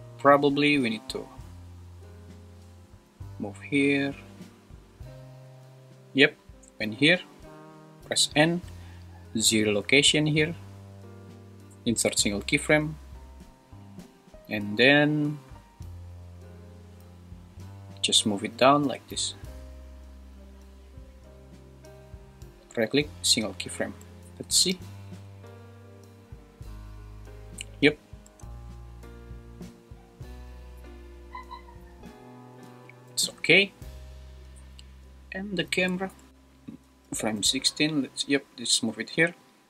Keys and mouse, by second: 2.7 click, 3.5 Right, 3.9 Right, 4.2 Right, 4.4 Right, 4.7 Right, 4.9 Right, 5.5 Right, 8.1 n, 9.8 right click, 13.5 Right, 13.8 Right, 14.0 Right, 14.3 Right, 14.4 Right, 14.6 Right, 14.8 Right, 15.0 Right, 15.2 Right, 15.3 Right, 15.5 Right, 15.8 Right, 16.2 Right, 16.4 Right, 16.7 Right, 16.9 Right, 18.5 g, 18.8 z, 22.5 right click, 24.2 shift+Left, 24.6 space, 28.3 space, 33.1 super+s, 36.0 shift+Right, 36.3 Left, 36.3 click, 37.1 g, 37.4 z.